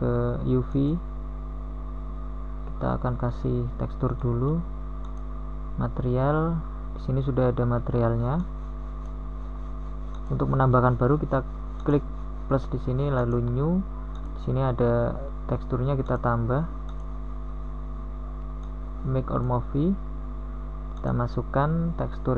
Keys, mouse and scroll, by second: 2.3 Tab.